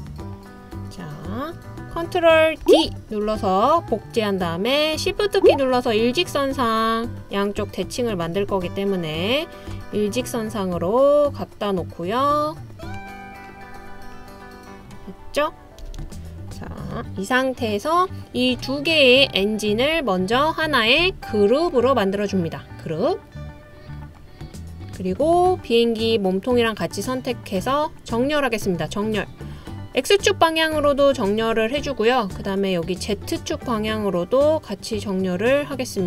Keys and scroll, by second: 2.7 super+d, 15.8 Left, 16.0 Left.